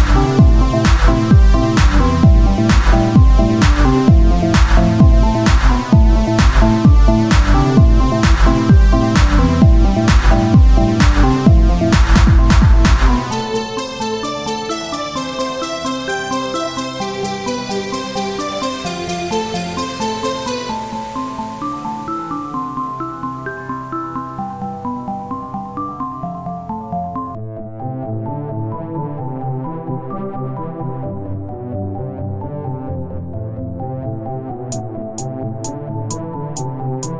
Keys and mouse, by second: 0.9 click, 1.2-2.6 right drag, 1.9 click, 2.6 Tab, 7.9 KP_1, 8.3-12.5 z, 14.4 KP_1, 15.4 Tab, 17.6 click, 18.1 Tab, 18.8 shift+d, 20.6 s, 23.0-25.0 drag, 25.9 KP_1, 26.2 z, 29.9 Tab, 31.2 a, 33.0 s, 36.6 s.